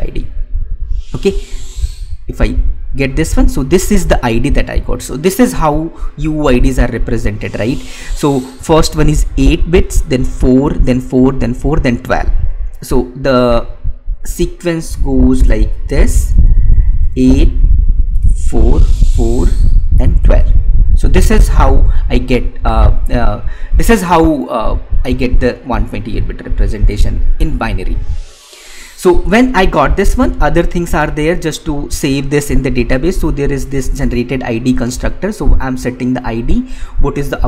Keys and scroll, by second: 16.9 space.